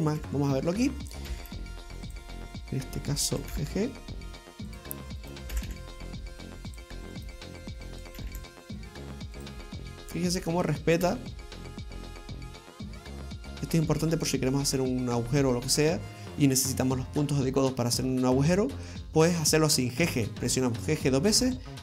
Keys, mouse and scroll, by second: 0.0 right click, 0.2 g, 1.0 right click, 1.3 g, 3.3 right click, 3.5 g, 5.3 right click, 5.6 g, 7.2 right click, 8.0 right click, 8.2 g, 9.7 middle click, 13.3-13.7 scroll down 2, 14.0 middle click, 15.4 middle click, 20.7 right click, 21.3 g.